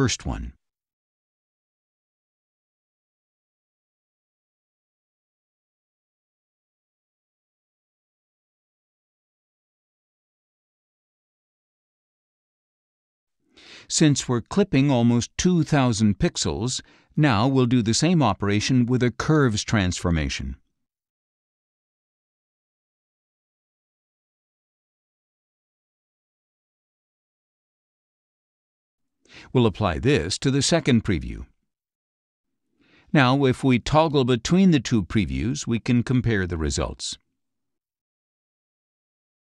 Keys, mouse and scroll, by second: 1.5 click, 4.0 click, 5.2-6.2 drag, 6.8-8.0 drag, 8.5-10.3 drag, 11.7-13.0 drag, 15.7 click, 19.2 click, 22.7-25.2 drag, 26.0 click, 27.0 click, 28.9 click, 30.7-32.2 drag, 35.5 click, 36.7 click, 37.8 click, 38.6 click.